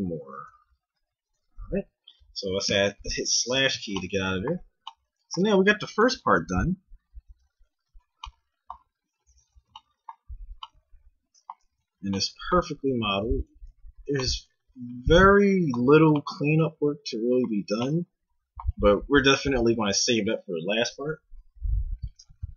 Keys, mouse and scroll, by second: 1.3 Tab, 2.7 KP_Divide, 3.7 z, 7.6 a, 11.8 Tab, 13.2 Tab, 13.6 Tab.